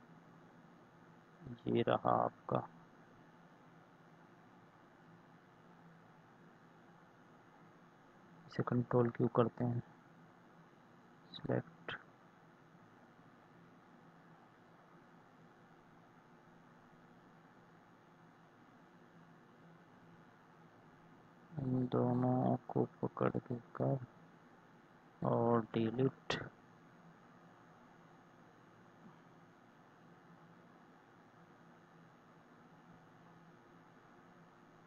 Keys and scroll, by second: 8.6 ctrl+q, 20.0 ctrl+z, 25.5 Delete.